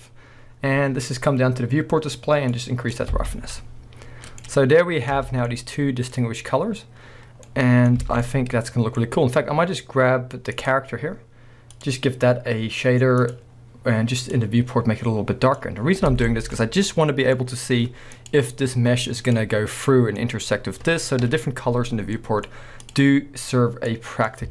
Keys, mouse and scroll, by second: 2.5 click, 3.2 alt+a, 3.4 scroll down 1, 3.5-4.4 middle drag, 5.2 Tab, 5.2-8.0 middle drag, 5.4 scroll down 2, 6.2-7.5 scroll up 2, 8.0 alt+a, 8.3-10.6 middle drag, 9.0-10.6 scroll up 2, 10.6 click, 11.8-13.3 drag, 15.8 scroll down 1, 16.1 alt+a, 16.3-18.2 middle drag, 16.6-17.0 scroll up 2, 18.2 click, 19.2 click, 19.9-22.8 middle drag, 21.2 KP_1, 21.9 scroll down 2, 22.5 scroll up 1, 22.8 click, 23.9-24.5 drag.